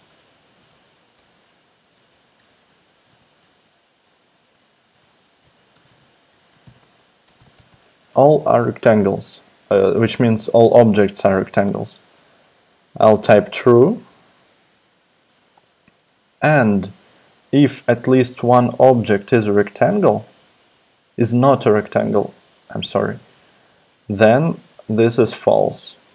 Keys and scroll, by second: 0.0-11.7 typing, 12.9-14.6 typing.